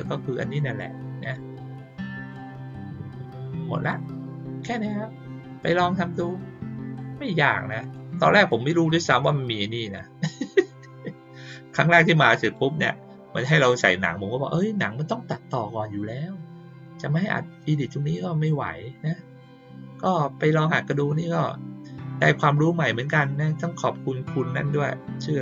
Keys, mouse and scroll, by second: 1.1 click, 3.7 click, 7.7 click, 9.8 click, 12.3 click, 19.8 click, 25.3 click.